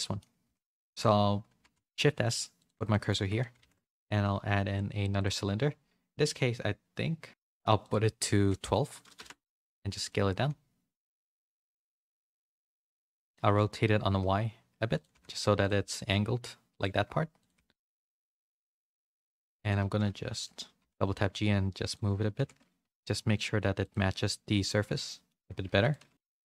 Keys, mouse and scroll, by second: 0.4 3, 0.8 shift+s, 1.9 shift+s, 2.8 middle click, 3.1 Tab, 3.4 a, 3.5 a, 11.1 s, 12.4 r, 15.1 s, 15.8 middle click, 16.1 s, 16.9 g, 17.5 s, 18.9 Tab, 19.1 3, 19.8 g, 20.7 g, 22.0 a, 22.3 r, 24.0 middle click, 24.7 z, 25.0 middle click, 25.9 click, 25.9-26.4 typing.